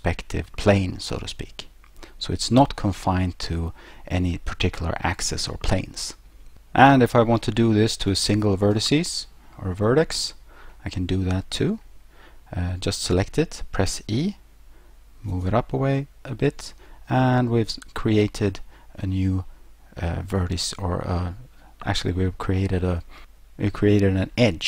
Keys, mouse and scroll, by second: 1.8-2.5 scroll, 6.8 right click, 8.8 ,, 9.7 scroll up 3, 10.0 scroll down 1, 10.4 scroll up 1, 13.9 e, 15.3 click, 16.0 middle click.